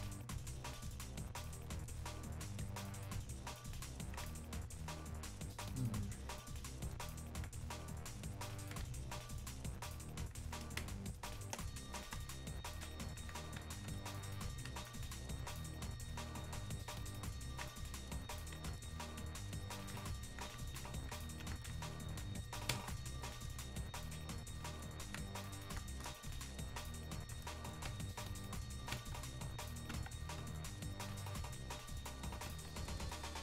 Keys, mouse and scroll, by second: 0.5 ctrl+click, 5.2-10.8 ctrl+drag, 10.8 ctrl+space, 14.3-19.5 drag, 25.4-27.0 drag.